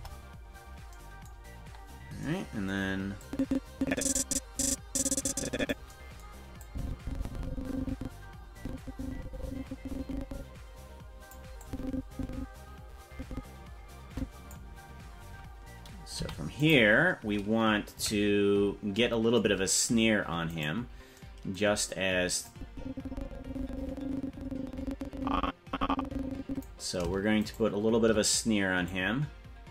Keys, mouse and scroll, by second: 1.5-2.2 scroll down 9, 3.2-5.7 drag, 6.6-11.4 drag, 11.6-14.6 drag, 16.1 i, 17.9 KP_Decimal, 18.5-19.0 scroll down 3, 20.7 right click, 22.5-26.7 drag, 27.6 shift+right click, 28.9-29.7 drag.